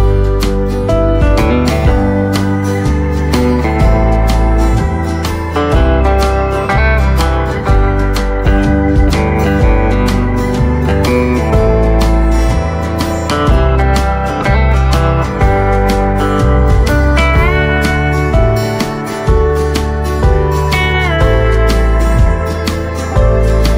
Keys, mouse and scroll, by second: 2.0 right click, 3.3 space, 3.6 click, 5.0 right click, 8.2 space, 8.4 click, 10.6 right click, 11.8 click, 14.9 right click, 16.0 click, 17.2 right click, 18.5 click, 19.7 right click, 20.8 click.